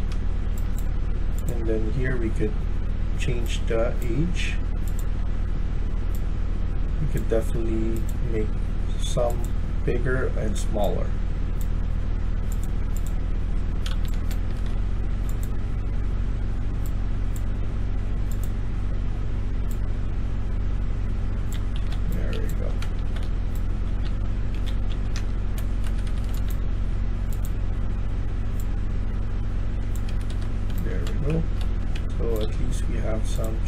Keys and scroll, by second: 0.0-1.1 typing, 13.9-14.6 d, 14.6 w, 15.0 w, 21.2-26.7 typing, 25.7 Escape, 26.0 Escape, 30.0 Escape, 30.2 Escape, 30.4-32.8 typing.